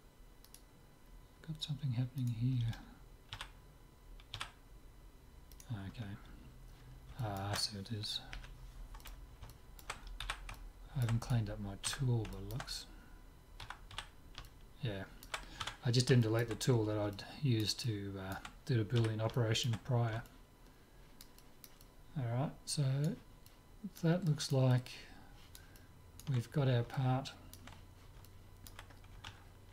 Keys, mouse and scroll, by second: 0.5-4.0 right drag, 3.4 z, 5.6-7.3 right drag, 7.2 click, 7.5 middle click, 8.4 Delete, 10.2 z, 11.3-13.2 right drag, 11.9 Tab, 13.7 a, 14.0 z, 15.7 Tab, 16.4-19.0 middle drag, 19.0 z, 19.9-29.7 middle drag.